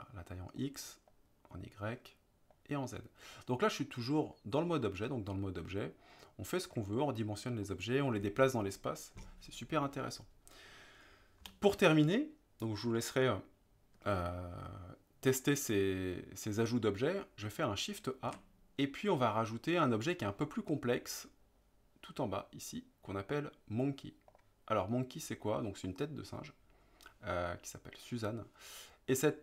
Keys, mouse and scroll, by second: 7.6 click, 9.7 click, 11.4 Delete, 18.3 shift+a, 25.8-27.5 middle drag, 29.3 middle click.